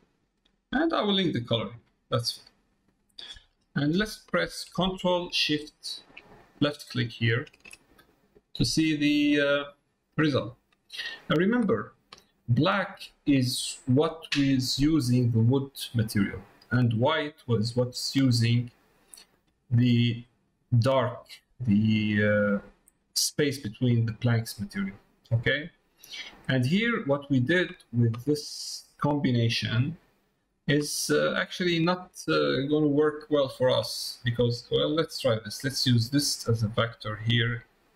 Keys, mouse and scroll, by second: 1.7-3.1 drag, 6.5 ctrl+shift+click, 10.9 middle click, 14.9 middle click, 18.2 middle click, 19.4 middle click, 20.7 click, 27.2 middle click, 27.8 middle click, 28.3 middle click, 28.7 middle click, 29.8 middle click, 31.8 middle click, 32.7 middle click, 33.9 middle click, 34.4 middle click, 34.7 middle click, 36.5-37.9 drag.